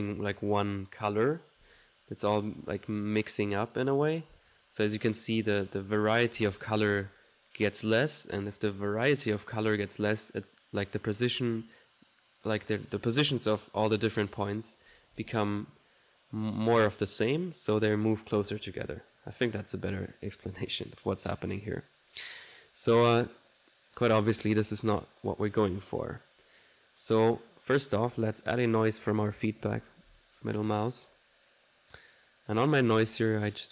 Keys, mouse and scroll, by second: 2.3 click, 20.0-21.4 middle drag, 23.5-24.5 drag, 24.7 middle click, 25.0 click, 27.6 click, 28.9 middle click, 29.7 ctrl+n, 31.4 click, 31.8 click, 32.1 click, 32.6 middle click, 33.3 click.